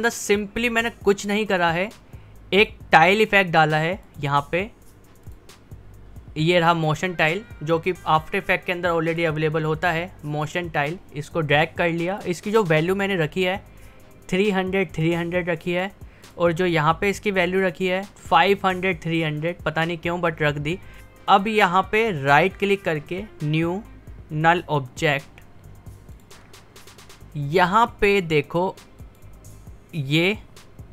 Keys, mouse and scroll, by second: 9.1 click, 12.1 click, 12.3 click, 16.3 click, 20.9 click, 22.3 right click, 22.3 right click, 25.1-29.0 drag.